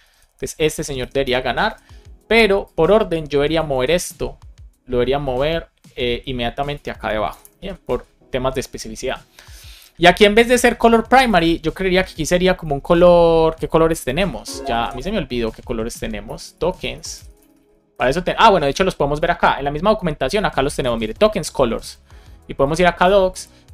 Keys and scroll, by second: 0.9 BackSpace, 1.6 Down, 3.6 super+x, 7.2 Return, 7.5 super+v, 7.8 super+s, 11.7 BackSpace, 14.0 super+p, 16.2 BackSpace, 16.8 BackSpace.